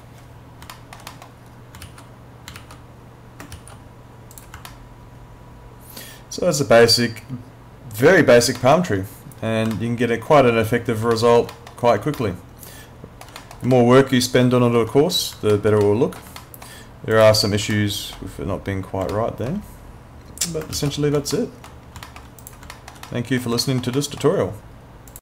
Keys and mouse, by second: 0.8 alt+middle click, 1.8 alt+x, 2.6 alt+x, 3.6 ctrl+x, 4.4 click, 4.7 alt+middle click, 8.6 middle click, 10.0 alt+middle click, 11.1 alt+middle click, 12.2 alt+middle click, 13.8 alt+middle click, 15.6 alt+middle click, 16.4 alt+middle click, 17.2 click, 17.7 alt+middle click, 19.1 alt+middle click, 20.8 x, 21.3 alt+middle click, 22.1 alt+middle click, 22.4 click, 22.7 alt+middle click, 23.6 alt+middle click, 25.1 click.